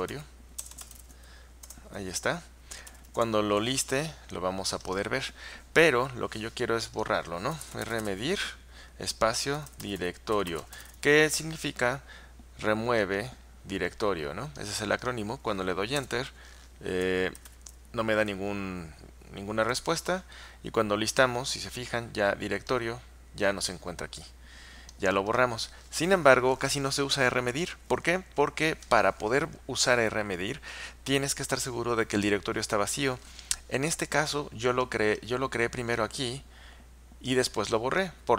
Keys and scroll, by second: 0.0-3.5 typing, 1.7 Return, 7.3-11.4 typing, 16.1 Return, 17.2-18.0 typing, 19.7 Return.